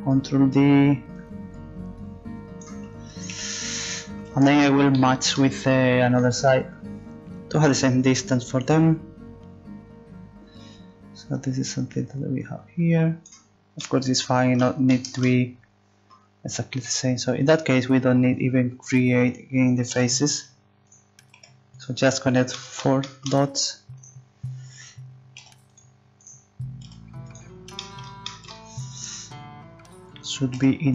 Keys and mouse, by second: 1.1 click, 1.8 click, 3.3 KP_1, 8.0 middle click, 8.3-9.7 drag, 16.7 right click, 17.2-18.3 drag, 19.9 g, 21.4 g, 24.0 click, 24.2-25.7 right drag, 25.4 g, 26.2 right click, 26.8 g, 27.8 click, 29.6 right click, 30.5 g.